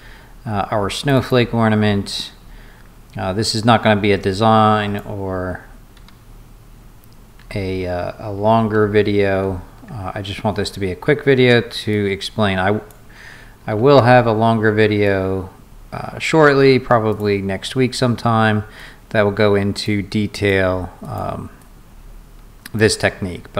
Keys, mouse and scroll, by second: 1.0 click, 1.2 click, 2.5 middle click, 2.5 scroll down 2, 2.9 middle click, 2.9 scroll up 2, 3.6-5.0 drag, 6.0 Escape, 8.8 ctrl+z, 9.3 ctrl+z, 11.9 click, 13.8 ctrl+z, 15.1-16.2 drag, 17.1 click, 18.8-19.8 drag, 20.4 click, 21.1 click, 21.6-22.8 drag.